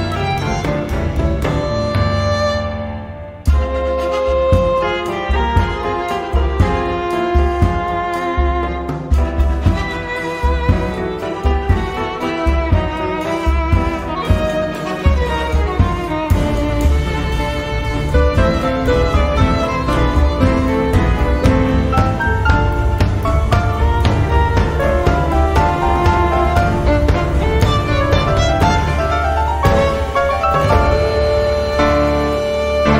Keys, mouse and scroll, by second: 1.9-4.8 drag, 6.6 click, 7.2 space, 7.6 click, 8.5-13.5 drag, 14.8 click, 15.2 space, 15.7 click, 16.1 space, 16.6 click, 17.1-21.2 drag, 21.3-22.7 drag, 25.8 click, 28.6 click, 29.0-31.6 drag, 32.8 click.